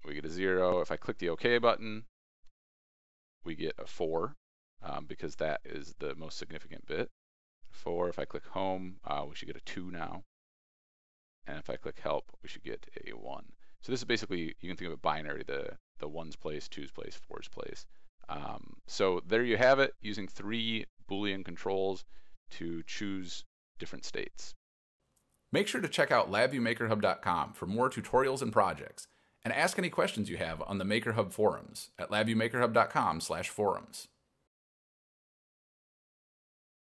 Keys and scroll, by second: 0.8 ctrl+r, 1.2 ctrl+e.